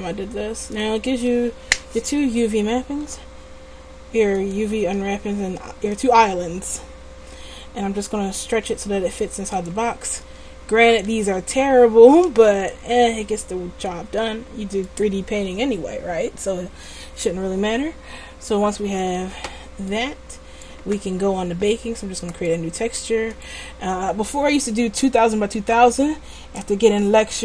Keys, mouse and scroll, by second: 3.1 g, 4.9 s, 8.6 s, 10.4 Tab, 10.9 Tab, 11.2 a, 12.6 Tab, 13.4 middle click, 17.5-19.2 middle drag, 19.2 Tab.